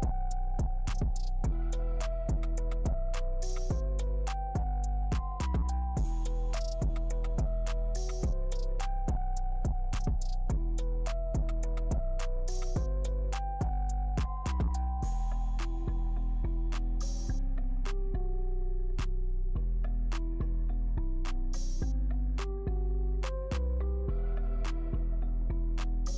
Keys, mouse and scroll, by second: 0.0 shift+click, 1.0-2.2 shift+drag, 2.2 Return, 2.9 right click, 3.4 q, 3.5 click, 4.4-5.7 right drag, 8.8 alt+click, 8.9 scroll up 1, 9.0 alt+click, 9.2 alt+scroll down 1, 9.3 alt+click, 9.7-10.9 alt+drag, 10.9-12.1 alt+drag, 12.1 alt+middle click, 12.2 alt+right click, 13.2 click, 13.9 shift+click, 14.2 alt+middle click, 14.7 shift+click, 16.4 click, 17.1 alt+middle click, 17.7-19.1 drag, 19.1 space, 20.6 space, 21.0-23.3 alt+drag, 23.3 alt+click, 24.8 click.